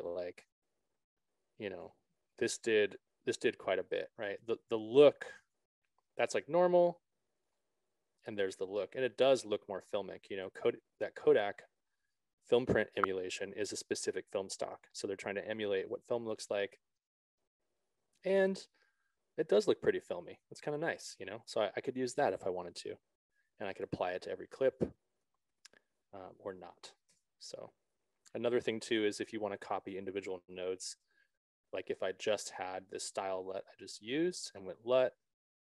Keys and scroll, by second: 27.5 BackSpace, 31.3 ctrl+z, 33.0 s.